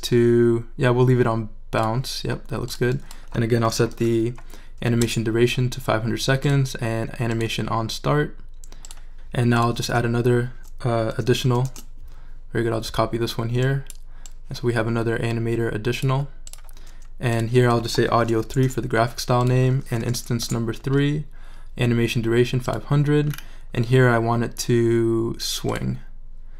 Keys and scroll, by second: 3.4-4.4 typing, 5.0 Return, 11.4 super+c, 11.6 super+v, 18.2 BackSpace, 18.3 3, 18.6 Return, 20.0 BackSpace, 20.1 3, 20.4 Return.